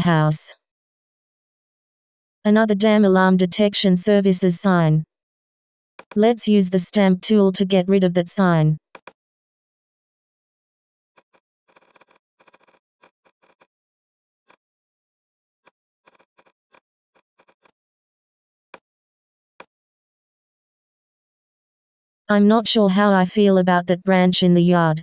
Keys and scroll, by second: 1.1 s.